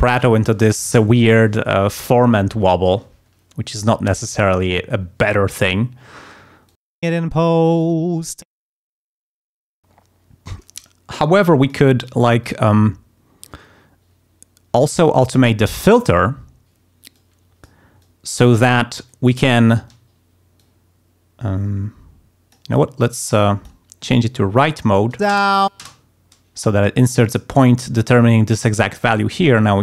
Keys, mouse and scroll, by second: 6.6 click, 7.1 space, 8.5 space, 9.1 click, 11.2 click, 12.4 click, 15.7 click, 17.1 click, 18.0 click, 19.0 click, 19.8 d, 20.5-22.7 drag, 23.3 click, 24.2 click, 25.3 space, 29.4-29.8 drag.